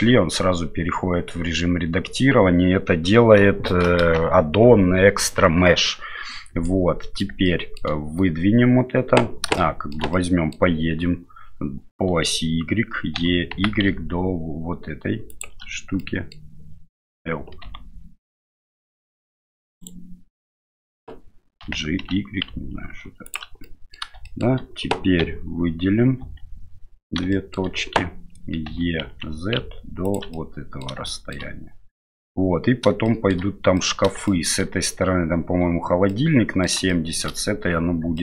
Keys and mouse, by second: 6.7 middle click, 7.4 shift+middle click, 9.6 shift+middle click, 10.1 middle click, 13.2 e, 16.0 middle click, 17.6 g, 21.6 g, 23.6 middle click, 24.3 middle click, 25.2 a, 26.2 a, 27.3 shift+middle click, 28.7 e, 30.4 middle click, 31.1 shift+middle click, 33.1 shift+middle click, 33.8 middle click, 34.3 shift+middle click, 36.1 middle click, 36.9 shift+middle click.